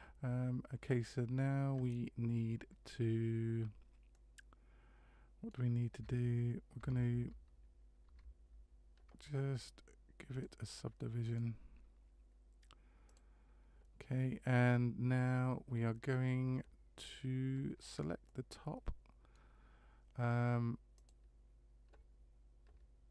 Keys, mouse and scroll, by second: 4.1 middle click, 6.0 Tab, 6.8 Tab, 8.1 Tab, 10.3 click, 11.2 click, 18.3 middle click, 20.9 click.